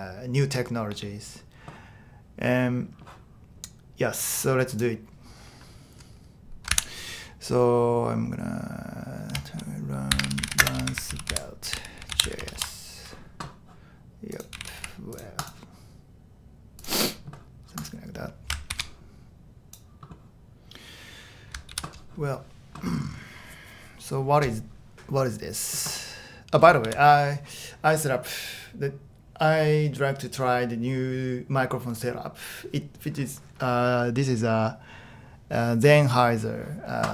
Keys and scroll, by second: 6.7 super+n, 9.9-13.1 typing, 14.3-15.3 typing, 18.7 shift+super+d, 21.7 super+h, 26.9 super+h.